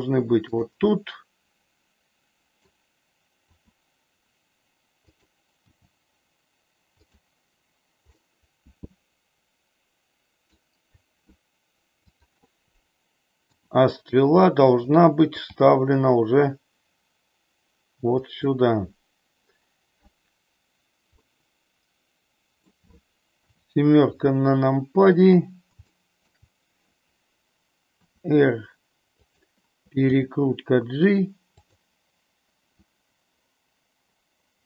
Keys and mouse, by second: 0.4 click, 0.8-2.6 middle drag, 3.6 r, 5.7 g, 8.2-10.6 middle drag, 12.1 click, 13.4 r, 15.4 g, 18.1 click, 21.2-22.6 middle drag, 23.4 KP_7, 25.8 middle click, 27.9 r, 29.2 click, 30.1 g.